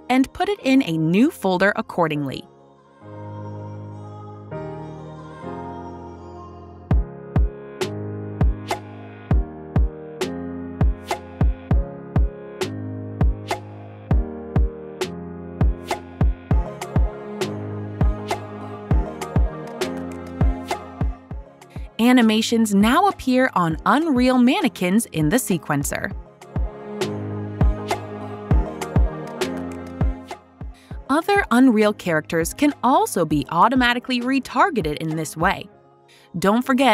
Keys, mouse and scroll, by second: 0.9 right click, 2.6 click, 6.2 click, 6.2 typing, 7.0 click, 11.1 click, 11.9 click, 13.8 click, 16.3 Delete, 16.3 click, 22.4 click, 23.9 click, 26.1 click.